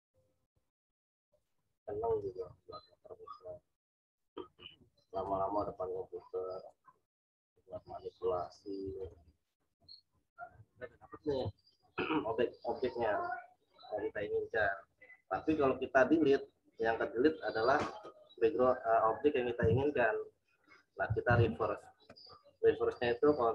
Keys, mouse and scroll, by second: 10.5 z, 10.9 alt+click, 21.0 alt+click, 21.2 ctrl+z.